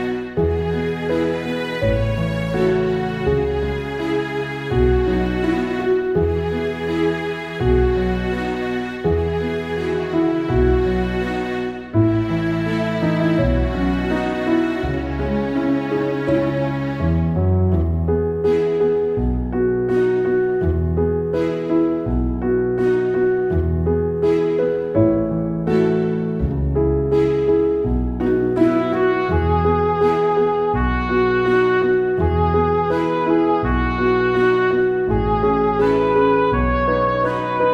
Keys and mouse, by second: 0.1 ctrl+z, 0.6 ctrl+z, 1.9 ctrl+z, 1.9 right click, 2.1 ctrl+z, 2.4 ctrl+z, 2.8 ctrl+z, 3.0 right click, 3.1 right click, 3.5 ctrl+z, 4.7 ctrl+z, 4.9 ctrl+z, 5.7 right click, 7.3 right click, 7.6 ctrl+z, 8.5 right click, 8.8 ctrl+z, 16.9 ctrl+z, 19.9 ctrl+z, 20.2 ctrl+z, 20.4 right click, 20.7 ctrl+z, 25.9 ctrl+z, 26.1 ctrl+z, 27.1 ctrl+z, 27.3 ctrl+z, 27.5 ctrl+z, 27.6 ctrl+z, 27.8 ctrl+z, 28.1 ctrl+z, 28.3 ctrl+z, 29.7 ctrl+z, 30.2 ctrl+z, 30.3 ctrl+z, 30.5 ctrl+z, 30.7 ctrl+z, 31.1 ctrl+z, 31.6 ctrl+z, 32.4 ctrl+z, 32.7 ctrl+z, 34.8 ctrl+z, 35.4 ctrl+z, 36.5 ctrl+z.